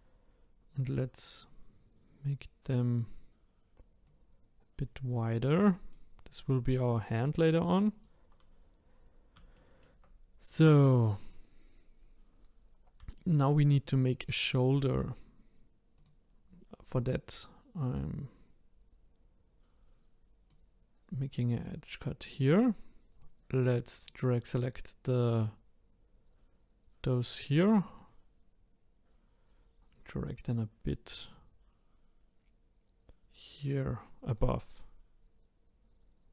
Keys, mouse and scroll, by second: 4.0 click, 5.9-7.9 middle drag, 7.9 click, 9.5-11.2 shift+middle drag, 11.2-13.1 drag, 13.1-15.9 shift+middle drag, 15.9-20.5 drag, 22.2-23.2 drag, 25.0 click.